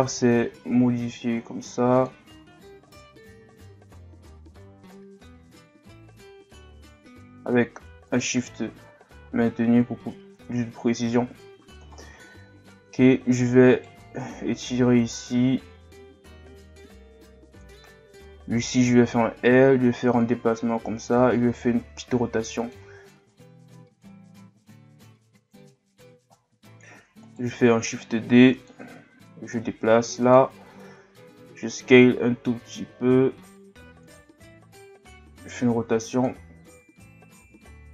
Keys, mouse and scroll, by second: 2.8 alt+right click, 9.3 scroll down 3, 10.5 scroll up 1, 10.8 Tab, 11.9-12.7 scroll down 1, 12.7-13.7 scroll up 2, 13.7 alt+right click, 14.6-17.7 drag, 18.5 right click, 19.0 l, 20.2-21.5 drag, 21.5 r, 23.3-25.8 drag, 25.8-26.2 scroll down 1, 26.4-27.0 scroll up 2, 27.0 shift+d, 27.8-31.5 drag, 31.5 s.